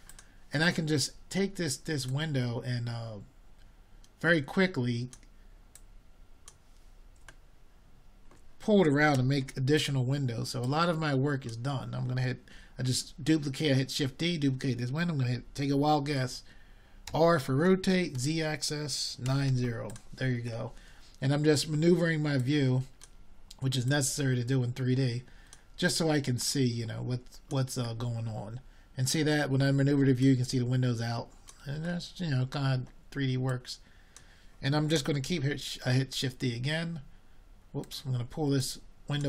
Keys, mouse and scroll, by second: 1.5 shift+d, 8.2 shift+d, 11.0 r, 14.9-19.1 middle drag, 19.7-23.5 middle drag, 23.5 shift+d, 25.6 click, 31.2 r, 34.9 middle drag, 35.1 middle click, 35.3 middle click, 35.6 middle click, 36.6-37.3 middle drag.